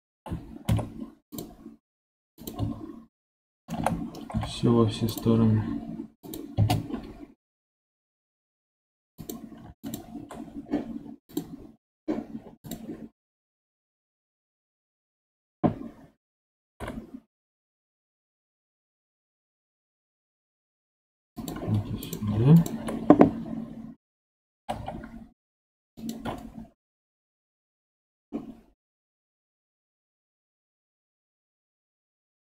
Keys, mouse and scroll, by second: 0.1 k, 3.7 k, 8.8 2, 9.1 click, 9.7 shift+click, 16.5 g, 21.9 click, 22.5 shift+click, 24.5 g.